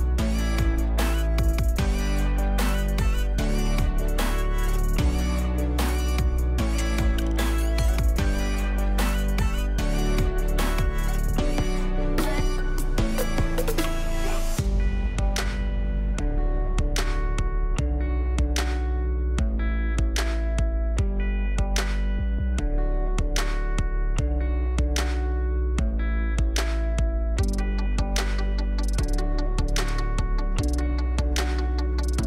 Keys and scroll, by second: 16.5 ctrl+b, 19.9 space, 21.5 ctrl+space, 21.8 ctrl+space, 26.8 space, 29.2 space, 30.2 space.